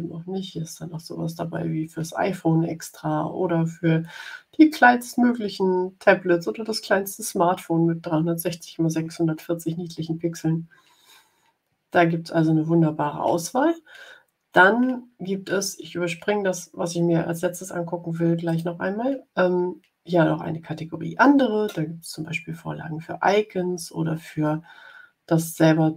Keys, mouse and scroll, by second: 18.4 click.